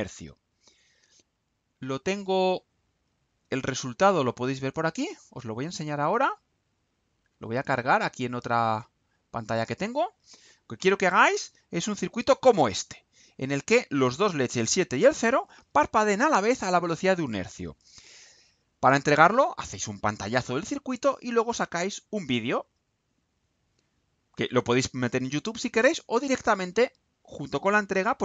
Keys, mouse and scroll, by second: 0.4 click, 4.5 click, 5.6 click, 7.0 click, 9.3 click.